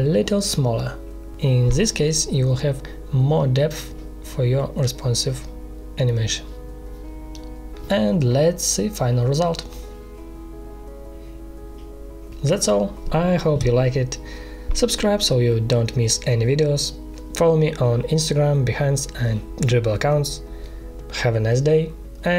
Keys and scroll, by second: 0.4 ctrl+shift+c, 0.6 ctrl+[, 0.7 space, 1.5 ctrl+shift+[, 5.0 space, 7.2 space, 8.7 ctrl+Return.